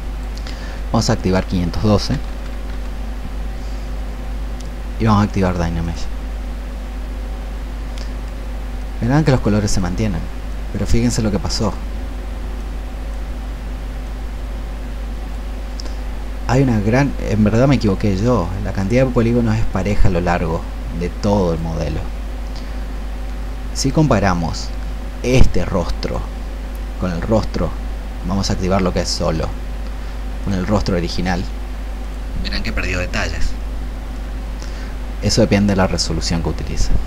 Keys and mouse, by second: 1.9 KP_5, 2.2 KP_1, 2.3 KP_2, 5.7-37.0 drag.